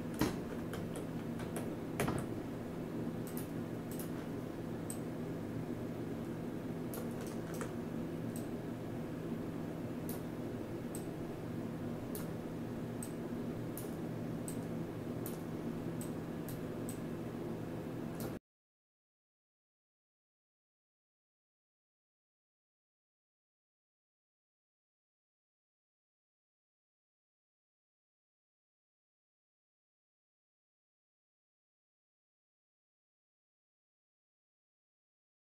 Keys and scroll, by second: 0.7 ctrl+z, 1.4 w, 2.0 w, 30.3-31.2 typing.